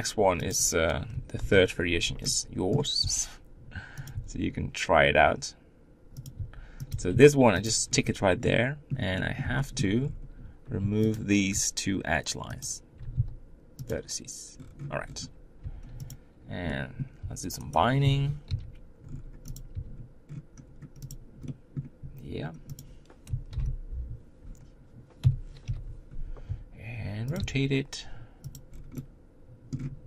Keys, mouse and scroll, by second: 0.5 click, 1.4 ctrl+l, 2.2 middle click, 3.0 r, 4.1 g, 6.4 r, 6.9 g, 7.9 scroll up 3, 8.5-10.0 middle drag, 10.0-11.1 scroll up 5, 11.1 alt+click, 12.6 alt+shift+click, 13.9 x, 14.6-15.3 scroll down 8, 15.3 Tab, 15.6 Tab, 16.1 click, 16.7 middle click, 17.2 r, 18.0 0, 18.5 g, 19.7 r, 21.5-22.8 middle drag, 22.8 click, 23.5 ctrl+l, 25.2 KP_7, 25.7 o, 26.5 r, 27.4 g, 28.7 scroll down 1, 28.9 middle click, 29.7-30.0 scroll up 1.